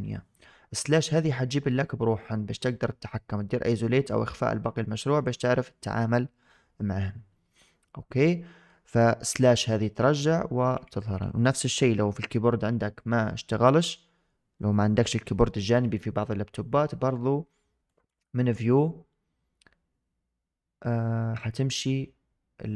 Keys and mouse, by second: 0.9-4.0 middle drag, 4.1-5.4 middle drag, 8.1-8.6 middle drag, 9.2 KP_Divide, 9.9 KP_Divide, 10.6 KP_Divide, 11.1 KP_Divide, 17.9-22.7 drag.